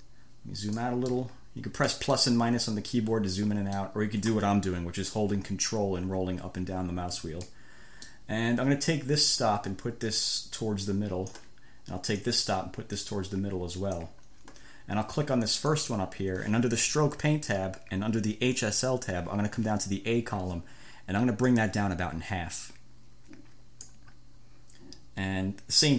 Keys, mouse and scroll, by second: 0.3-0.9 ctrl+scroll down 4, 1.1 ctrl+click, 1.3 ctrl+middle click, 1.5-1.9 ctrl+scroll down 2, 2.1 ctrl+middle click, 3.6 ctrl+middle click, 6.0 ctrl+scroll down 2, 6.3-7.4 ctrl+scroll up 4, 7.7 ctrl+middle click, 8.0 scroll, 8.3 click, 9.6-11.8 drag, 12.4-14.4 drag, 16.0 click, 18.8 click, 21.7-24.3 drag.